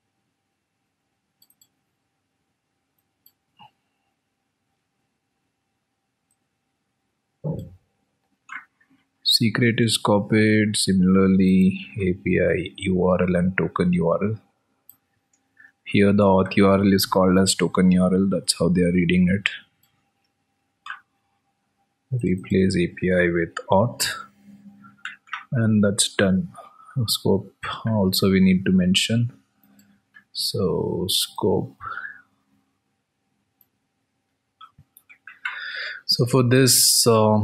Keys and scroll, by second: 6.0 ctrl+v, 11.1 ctrl+v, 14.8 ctrl+s, 17.4 alt+Tab, 25.4 ctrl+v, 26.0 ctrl+s, 29.3 alt+Tab.